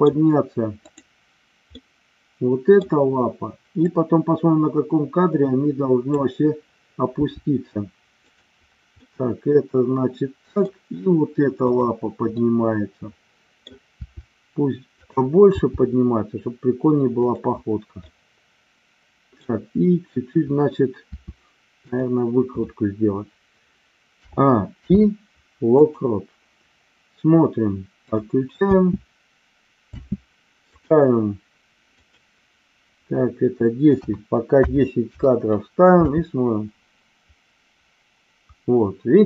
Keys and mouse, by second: 1.7-2.7 middle drag, 3.8-6.0 drag, 7.2 r, 8.3 click, 9.0-10.6 middle drag, 11.5-12.6 drag, 12.9 middle click, 14.0 r, 15.0 click, 15.5 g, 17.3 click, 18.0-19.6 middle drag, 21.1 r, 21.9 click, 24.1 a, 24.9 i, 28.0 click, 28.6 space, 30.7 click, 32.0-35.4 drag, 36.0 space.